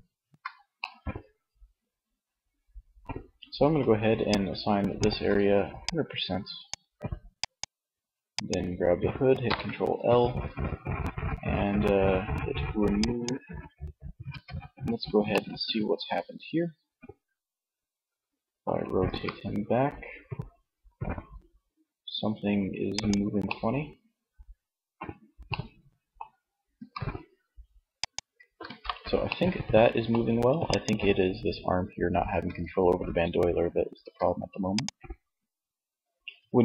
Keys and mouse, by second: 0.0-1.8 middle drag, 8.6 ctrl+l, 13.4 Tab, 18.3 r, 22.9 middle click, 26.0 r, 27.1 click, 27.8 alt+r, 31.5 Tab, 33.2 Tab.